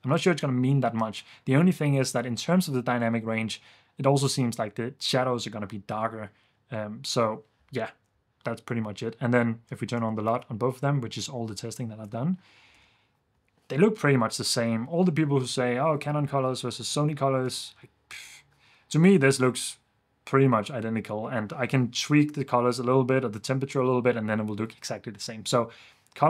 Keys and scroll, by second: 10.0 super+d, 12.2 super+d, 12.7 super+f.